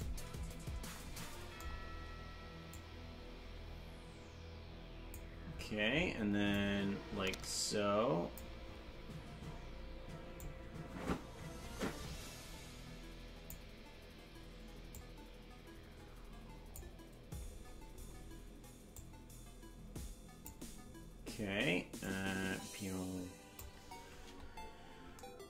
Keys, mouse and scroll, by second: 0.4-0.9 scroll down 5, 2.7-5.2 drag, 6.6-8.4 drag, 10.4-13.6 drag, 14.9-16.4 drag, 17.4-18.2 scroll up 8, 18.9-20.5 drag, 22.1-23.7 drag, 24.1-24.8 scroll down 5.